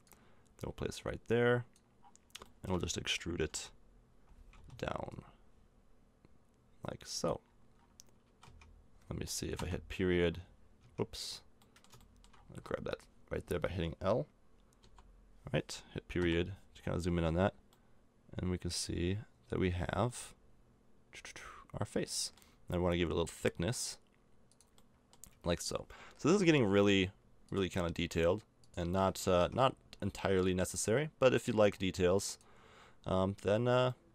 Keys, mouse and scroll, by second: 2.0-4.3 middle drag, 3.4 e, 5.1-6.8 drag, 7.4 middle click, 8.2 a, 8.4 Tab, 9.5 KP_Decimal, 9.6 middle click, 10.8 Tab, 12.7 middle click, 14.8 l, 16.1 KP_Decimal, 22.8 e, 25.3 a, 26.2 l, 29.0 a, 29.3 Tab, 33.5 middle click.